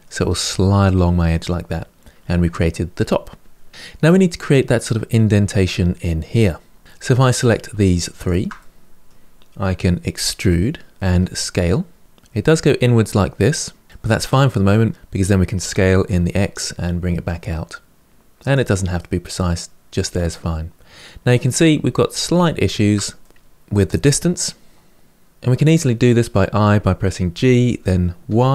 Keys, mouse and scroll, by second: 6.8 3, 7.1 click, 7.6 shift+click, 7.9 shift+click, 8.3-10.1 middle drag, 10.1 e, 13.9-15.3 middle drag, 15.3 s, 18.7-21.5 middle drag, 21.5-22.1 scroll up 3, 22.1-23.4 shift+middle drag, 23.4-24.1 scroll up 2, 24.1-25.3 middle drag, 27.1 g.